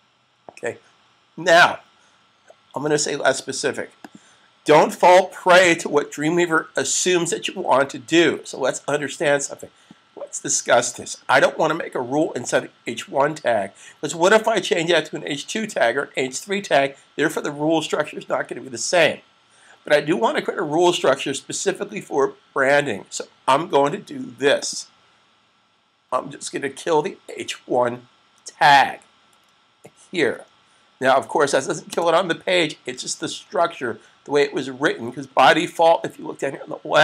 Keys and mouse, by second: 3.8 click, 9.2 click, 24.4 double click, 31.9 typing.